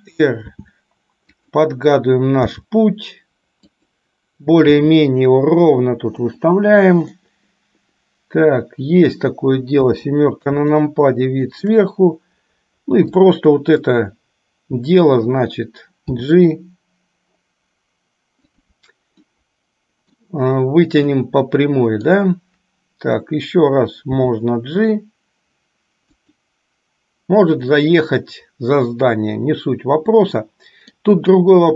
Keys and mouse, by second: 0.7 r, 2.7 g, 4.9 r, 7.3-9.4 middle drag, 9.9 KP_7, 11.0 shift+middle click, 13.3 click, 16.3 g, 19.4-20.5 middle drag, 21.3 middle click, 24.3 g, 27.8-31.0 middle drag.